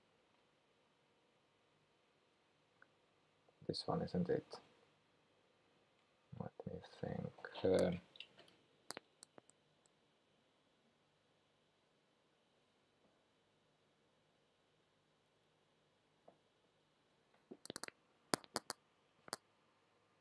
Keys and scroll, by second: 4.3 Return, 6.1 Return, 6.2 F1.